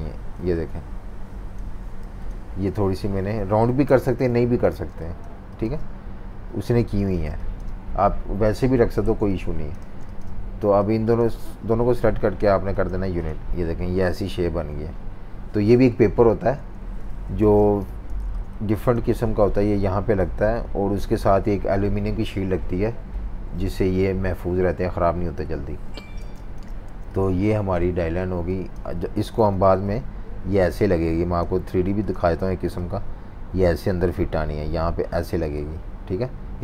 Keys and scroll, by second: 2.0 v, 3.8 super+-, 4.0 super+-, 4.1 super+-, 4.7-5.6 typing, 6.9-7.6 typing, 8.8-10.3 typing, 15.8 super+-, 16.0 super+-, 16.2 super+-, 17.4-19.3 typing, 22.8 super+-, 23.3 super+-, 25.5 super+-, 26.2-28.5 typing, 29.4 super+g.